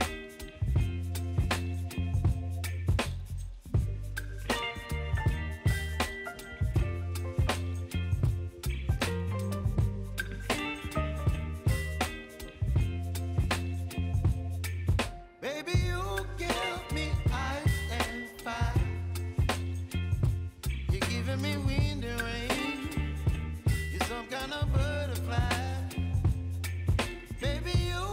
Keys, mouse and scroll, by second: 2.1-3.6 drag, 6.9 p, 7.8 click, 8.1 space, 11.0 click, 13.2 v, 14.0-22.1 drag, 22.1 ctrl+z, 23.4-28.0 drag.